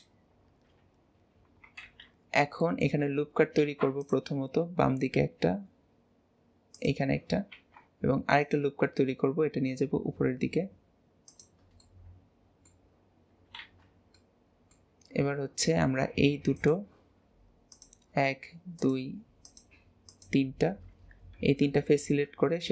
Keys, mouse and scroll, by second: 0.6 KP_7, 1.8 alt+z, 2.0-2.5 scroll down 2, 2.5 shift+middle click, 3.0-3.5 scroll up 1, 3.5 ctrl+r, 7.5 ctrl+r, 11.8-13.5 middle drag, 13.5 alt+z, 14.1-16.5 middle drag, 16.5 click, 17.7 click, 18.7 shift+click, 19.4 shift+click, 20.1 shift+click, 21.5 KP_1, 22.5-22.7 scroll down 2.